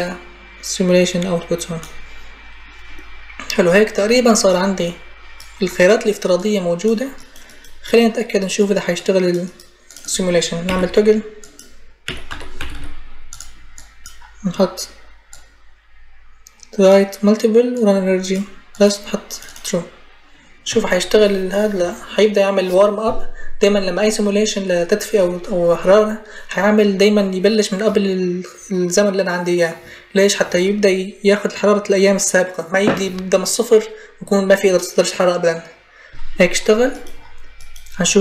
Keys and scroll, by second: 10.5 t, 11.6-12.9 typing.